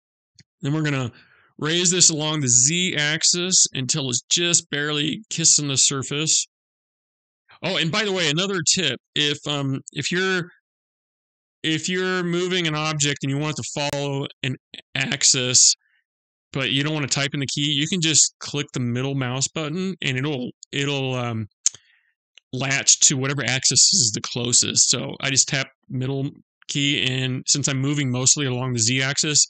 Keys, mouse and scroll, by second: 6.1-6.7 scroll up 2, 6.7 scroll down 1, 6.8-10.1 scroll down 1, 10.1 scroll down 1, 10.1 g.